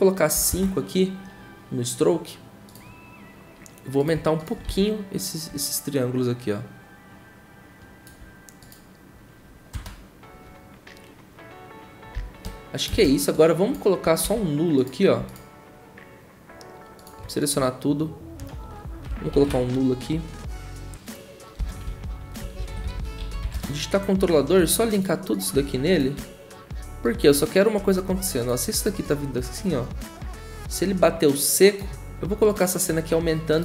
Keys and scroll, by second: 0.3 typing, 0.5 Return, 4.4-5.1 typing, 9.5-10.2 typing, 12.1 ctrl+a, 19.6 ctrl+alt+shift+y, 21.6 Return, 21.6-23.9 typing.